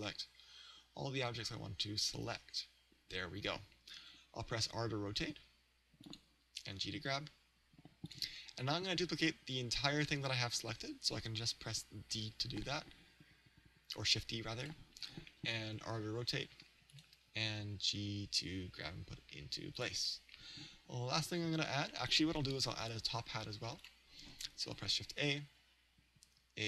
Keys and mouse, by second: 5.0 r, 6.1 click, 6.9 g, 8.2 click, 12.1 shift+d, 14.8 click, 15.7 r, 17.0 click, 17.6 g, 19.9-22.0 drag, 23.8-26.6 drag, 24.8 shift+a.